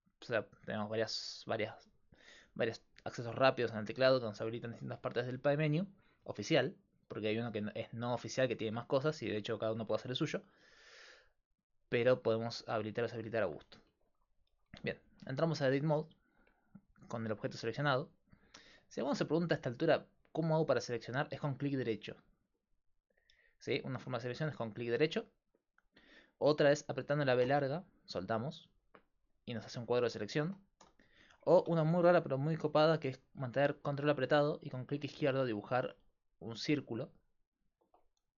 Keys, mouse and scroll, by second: 16.2 click, 17.7 click, 18.5-22.0 middle drag, 22.0-23.4 drag, 22.0-27.4 right drag, 27.4 b, 30.9 a, 34.6-37.5 drag, 38.2-38.3 drag.